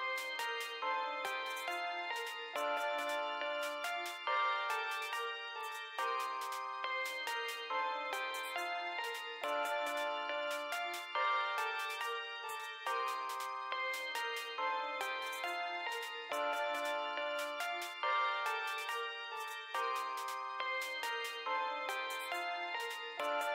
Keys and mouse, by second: 0.0 BackSpace, 2.9 x, 4.0 4, 4.4 2, 8.2 click, 10.8 click, 15.8-20.0 typing, 21.6-22.4 typing.